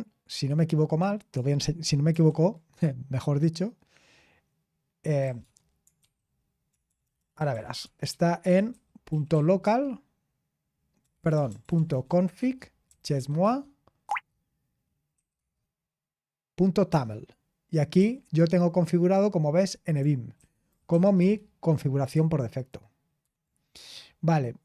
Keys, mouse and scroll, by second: 2.1 super+7, 4.9-9.8 typing, 11.0-12.9 typing, 13.4 Tab, 15.1 typing, 17.9 typing, 20.1-20.8 typing, 21.1 Tab, 22.9-24.6 typing, 24.4-24.6 scroll down 1.